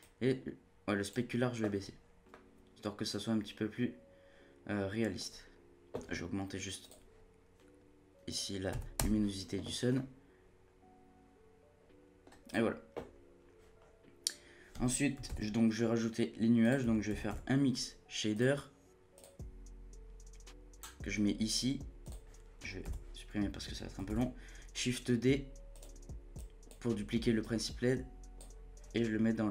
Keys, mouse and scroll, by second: 0.0-2.0 drag, 2.0 scroll down 1, 2.3-5.2 middle drag, 5.2-6.8 scroll up 1, 6.8-9.7 drag, 9.7 scroll down 2, 9.9-12.5 middle drag, 12.5-13.1 drag, 13.1-13.8 scroll up 1, 13.8-15.3 scroll down 1, 15.3 shift+a, 22.0 click, 22.8 z, 24.1 shift+d, 26.3-29.5 drag.